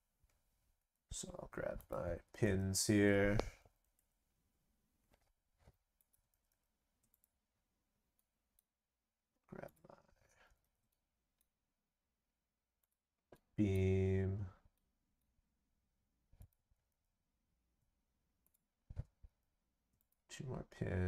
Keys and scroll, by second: 2.2 ctrl+c, 2.4 ctrl+v, 6.3 ctrl+c, 6.5 ctrl+v, 10.4 ctrl+c, 10.6 ctrl+v, 16.7 ctrl+c, 16.8 ctrl+v, 19.3 ctrl+v.